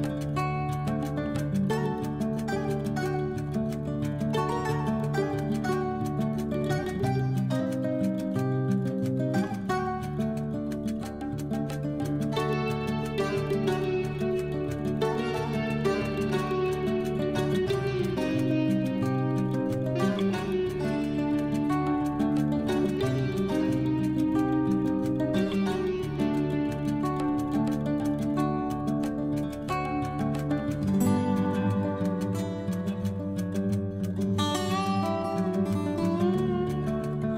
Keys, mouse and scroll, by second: 1.1-19.0 typing, 20.5-24.3 typing, 29.6 Left, 37.1-37.3 typing.